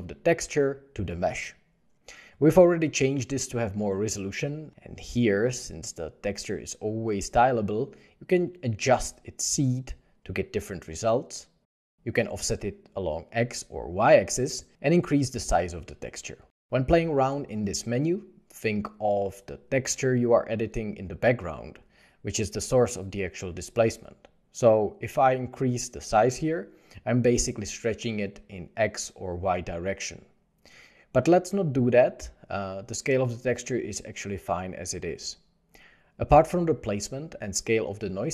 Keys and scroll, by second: 12.6 Return, 12.6 2, 14.3 Return, 14.4 0, 16.4 2, 16.6 Return, 35.4 Return.